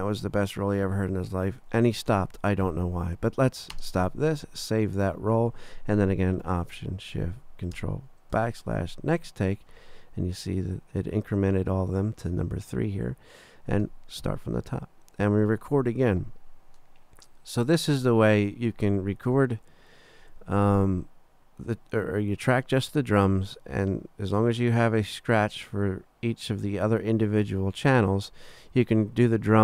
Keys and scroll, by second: 3.7 space, 8.3 ctrl+alt+shift+\, 13.8 3.